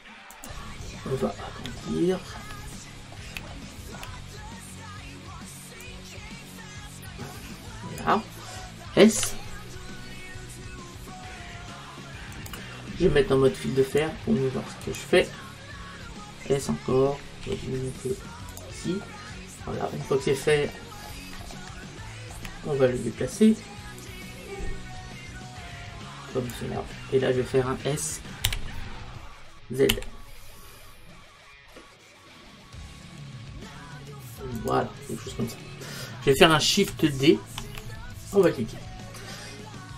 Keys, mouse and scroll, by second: 0.5 click, 1.8-5.4 middle drag, 5.9 click, 9.2 s, 12.5-15.8 drag, 17.5 s, 18.6 click, 20.5-24.1 middle drag, 24.1 click, 26.9-29.0 middle drag, 28.5 s, 34.7 click, 35.6-37.6 middle drag, 37.6 shift+d.